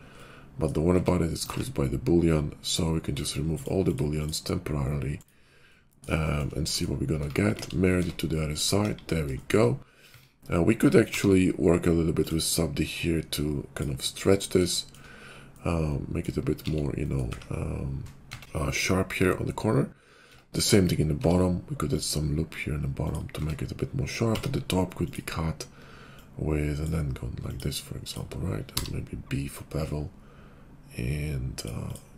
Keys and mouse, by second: 0.9 Tab, 1.4 ctrl+`, 3.5-7.9 drag, 7.1 Tab, 7.5 alt+x, 7.9 Tab, 8.8 KP_5, 10.0 Tab, 11.0 ctrl+r, 11.0-13.8 ctrl+drag, 13.8-15.5 middle drag, 16.6 alt+x, 17.3 `, 18.2 Tab, 20.3 Tab, 21.2 ctrl+r, 23.3 Tab, 24.2 d, 26.0-32.1 drag.